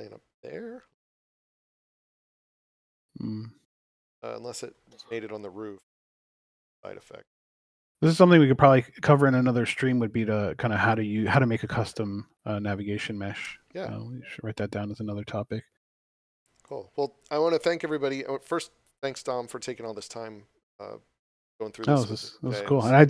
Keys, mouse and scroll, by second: 4.1 scroll down 1, 5.1 click, 7.8 scroll down 1, 8.2 click, 10.9 scroll up 1, 11.8 click, 16.0 click, 22.4 click.